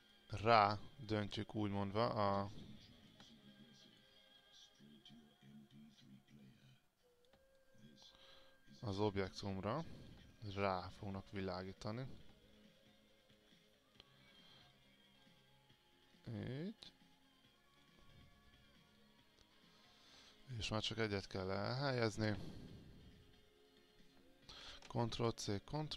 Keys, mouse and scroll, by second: 2.8 click, 3.6 alt+click, 4.4-4.9 scroll down 1, 5.2-6.5 drag, 7.7 alt+click, 9.8 click, 10.6 alt+click, 12.7 alt+click, 14.0 click, 14.9 alt+click, 16.2 click, 16.8 click, 20.6-21.8 alt+drag, 23.8 click, 24.7 ctrl+c, 24.9 ctrl+v.